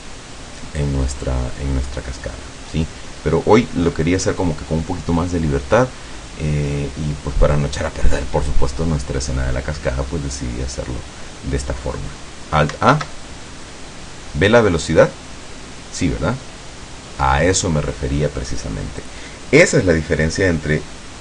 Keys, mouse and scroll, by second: 13.0 alt+a, 19.1 click.